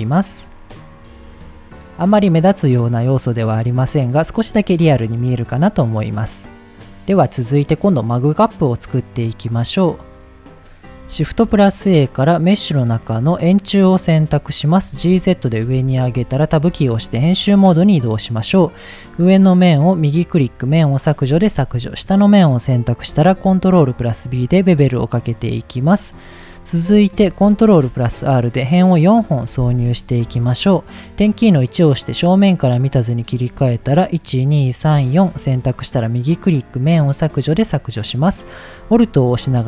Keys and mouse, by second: 9.1 click, 10.7 click, 11.2 shift+a, 14.8 g, 15.0 z, 15.5 click, 15.7 Tab, 16.3 shift+middle click, 17.3 click, 18.1 click, 18.9-20.5 right drag, 21.0 middle click, 21.7 click, 22.1 middle click, 23.2 ctrl+b, 25.8 click, 26.2 middle click, 27.0 shift+middle click, 27.6 ctrl+r, 29.2 right click, 30.2 KP_1, 32.3 click, 33.1 click, 33.7 shift+click, 34.4 shift+click, 35.5 right click, 37.4 click.